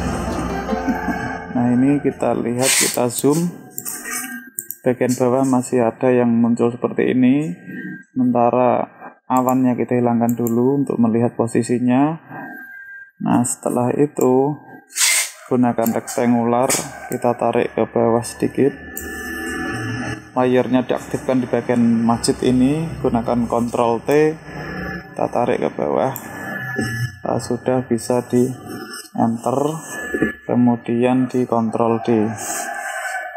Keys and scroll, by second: 23.5 ctrl+t, 31.6 ctrl+d.